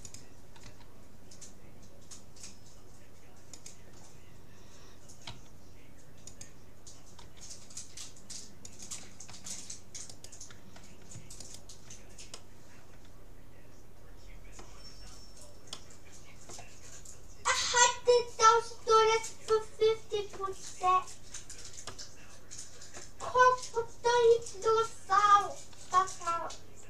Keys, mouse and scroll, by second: 0.7 r, 5.3 s, 7.3 g, 9.3 a, 10.1-12.7 right drag, 12.3-13.3 drag, 13.3-14.3 middle drag, 15.7-17.5 middle drag, 17.5-19.3 right drag, 19.5-21.1 middle drag, 21.3-21.9 scroll up 1, 21.9-23.7 middle drag, 26.5-26.8 middle drag.